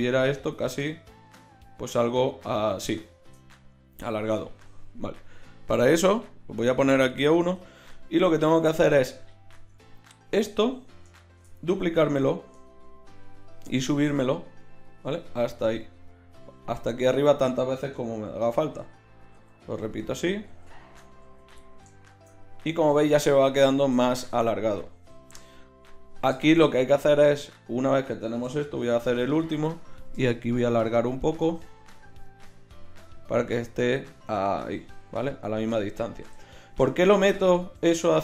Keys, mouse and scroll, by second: 8.1 z, 9.5 Tab, 11.3 shift+d, 18.8-21.2 typing, 29.0 shift+r, 30.3 middle click.